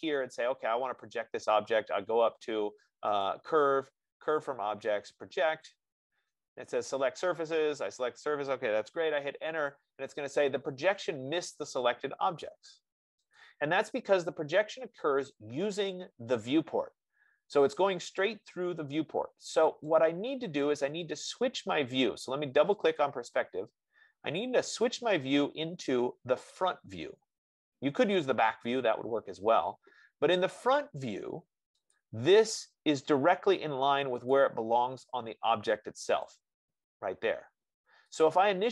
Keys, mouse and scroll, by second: 1.3-2.4 drag, 3.7 click, 9.3 Return, 13.8 click, 20.3 click, 22.0 click, 23.1 click, 23.5 click, 24.9-25.4 scroll, 25.6-27.4 scroll, 27.4-28.4 scroll down 12, 29.4 middle click, 32.3 click, 34.6 click, 36.6 click.